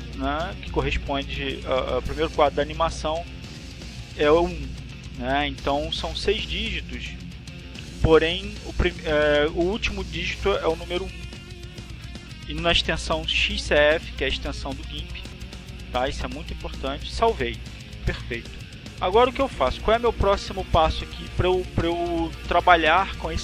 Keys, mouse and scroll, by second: 16.1 click.